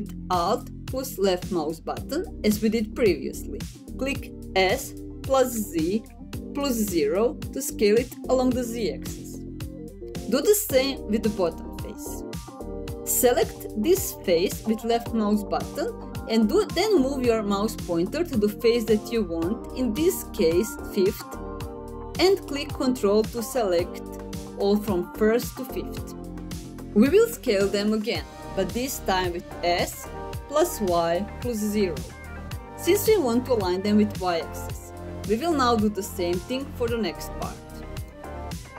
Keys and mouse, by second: 3.2 s, 4.1 z, 7.0 KP_0, 7.5 KP_Enter, 8.8 middle click, 10.6 click, 11.9 s, 12.3 z, 12.6 KP_0, 25.3 ctrl+click, 26.4 ctrl+z, 28.8 s, 30.5 y, 31.0 KP_0, 32.5 KP_Enter, 36.0-37.0 middle drag, 37.7 click.